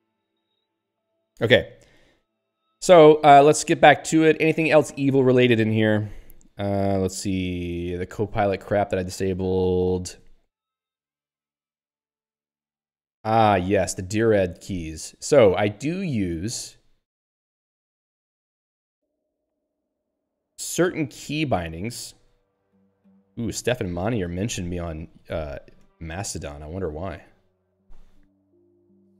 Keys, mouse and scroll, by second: 3.9 scroll down 1, 4.7 ctrl+s, 4.8 e, 5.1 l, 5.7 Down, 9.3 Up, 12.8 Return, 13.6 Up, 16.4 Down, 16.7 Up, 18.7 Down, 18.9 Up, 19.9 Down, 22.8 Up, 23.0 Down.